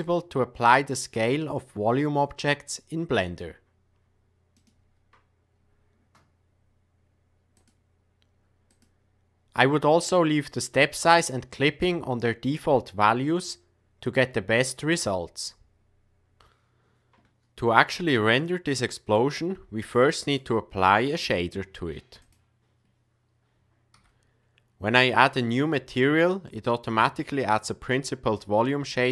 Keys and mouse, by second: 7.7-8.9 drag, 19.1-20.5 drag, 21.1-22.3 drag, 23.9 n, 25.1 click, 26.4 middle click.